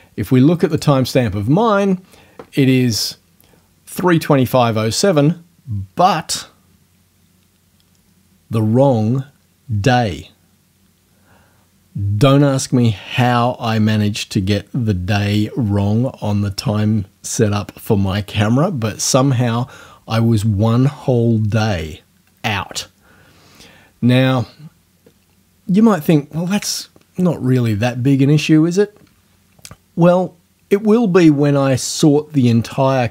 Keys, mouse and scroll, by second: 0.8 click, 3.0 click.